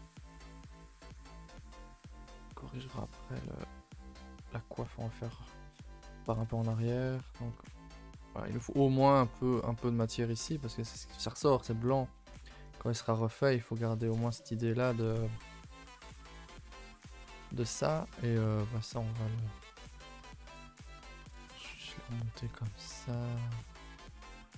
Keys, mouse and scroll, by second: 0.5 Left, 0.6 g, 1.9 Left, 1.9 g, 3.1 Left, 3.1 g, 3.8 Left, 3.8 g, 5.4-5.9 scroll down 2, 5.9 shift+middle click, 6.1-6.6 scroll up 2, 6.6 click, 6.8 shift+middle click, 7.2 Tab, 7.5 a, 7.7 a, 8.4 click, 8.5 Tab, 9.1 click, 9.7 click, 9.9 g, 12.3 click, 12.4 g, 13.0 click, 13.2 g, 14.1 Tab, 14.3 middle click, 14.9-15.3 scroll up 1, 15.4-15.8 scroll up 2, 15.8 shift+middle click, 16.0-16.5 scroll up 4, 16.5-17.0 shift+middle drag, 17.0 click, 17.2 shift+middle click, 17.4 scroll up 1, 17.6 Tab, 18.2 click, 18.5 g, 20.9-22.2 middle drag, 22.2 click, 22.4 g, 23.3 click, 23.4 g.